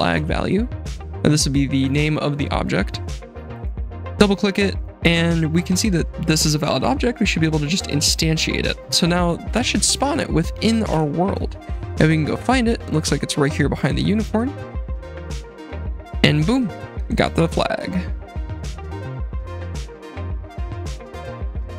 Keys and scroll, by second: 9.9 F7, 10.9 i, 11.3 d, 12.2 w, 15.0 s, 16.0 i.